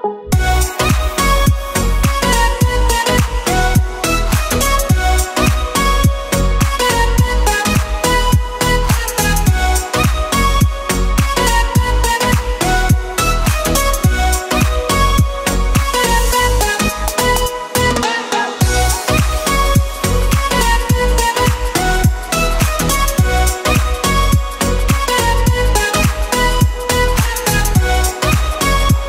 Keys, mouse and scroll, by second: 0.4 e, 2.7 s, 6.1 click, 6.8 click, 7.7 e, 10.4 s, 11.5 s, 14.9 click, 15.9 e, 18.3 z, 20.1 ctrl+z, 21.3 e, 26.8 s.